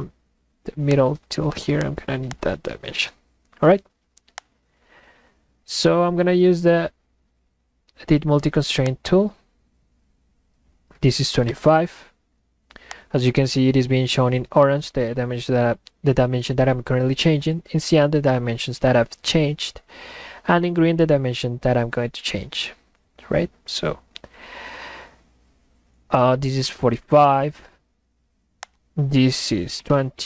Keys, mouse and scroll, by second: 0.9 click, 2.3 click, 4.4-5.3 drag, 8.9 click, 12.9 click, 28.6 click.